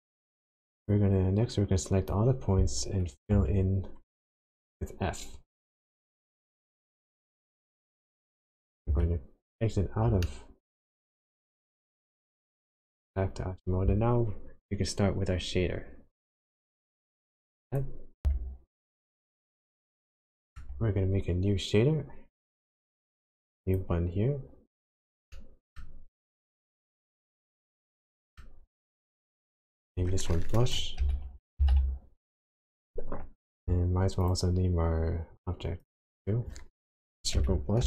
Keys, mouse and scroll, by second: 0.8 click, 3.8 f, 7.5 click, 8.8 Tab, 10.2 shift+middle click, 18.2 n, 18.9-19.5 scroll down 3, 19.5 scroll up 1, 19.9 shift+middle click, 20.7-21.1 shift+scroll up 1, 23.6 click, 25.2 middle click, 26.1-26.9 scroll up 8, 26.9-27.3 scroll down 2, 27.5 middle click, 29.7 click, 35.8 click, 36.0 click.